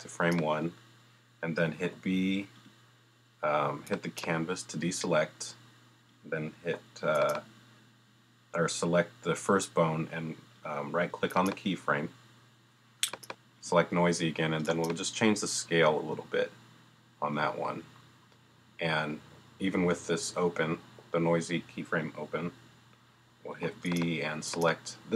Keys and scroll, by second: 1.8 b, 6.6 b, 23.6 b.